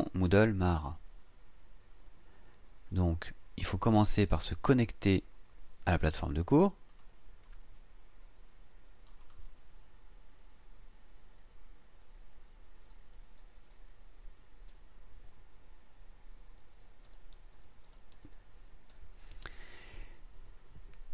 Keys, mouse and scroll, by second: 0.6 click, 6.9 click, 9.1 click, 11.4-14.4 typing, 14.7 Tab, 16.6-18.3 typing, 17.0 KP_Divide, 17.8 KP_Divide, 18.9 KP_Enter.